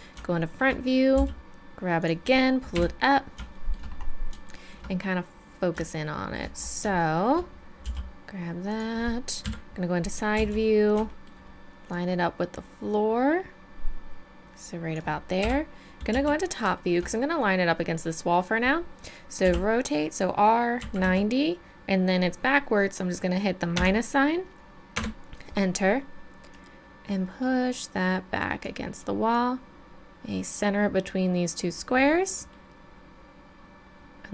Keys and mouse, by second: 1.2 g, 2.7 KP_7, 3.5-4.5 drag, 5.2 middle drag, 6.5-7.5 middle drag, 7.8 g, 9.4 KP_3, 10.3 z, 10.7-11.1 middle drag, 11.9 middle click, 15.4 KP_7, 16.1 middle click, 16.1 z, 19.4 r, 26.5-28.6 drag, 29.3-32.5 drag, 32.6-32.9 middle drag, 33.2-34.3 middle drag.